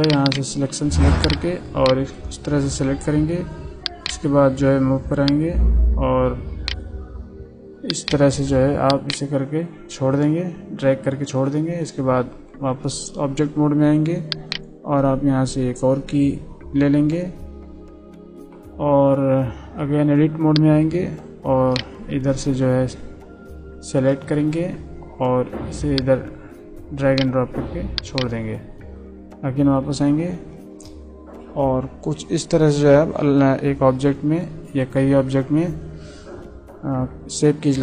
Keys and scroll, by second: 11.7 Tab, 19.5 Tab, 28.7 Tab.